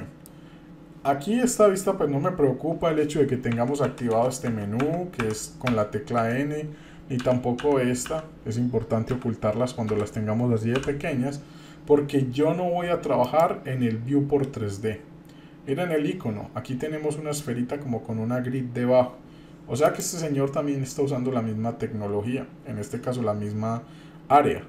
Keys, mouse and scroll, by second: 0.0-0.3 middle drag, 3.5-6.2 typing, 7.2 t, 7.6 t, 9.1 n, 9.9 n, 10.7 t, 13.2-19.0 drag, 19.8-24.6 drag.